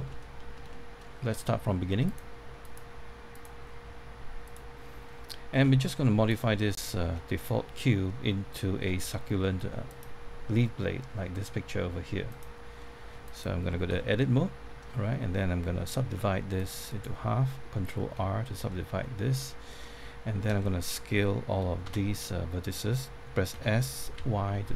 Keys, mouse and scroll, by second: 0.0 middle click, 2.0 click, 5.0 scroll up 1, 5.6 scroll down 1, 6.2 click, 7.0 scroll up 1, 7.4 middle click, 8.2 scroll up 1, 8.5 middle click, 12.7 middle click, 16.8 right click, 18.0-18.3 scroll up 1, 18.6 middle click, 21.8 a, 23.5 typing.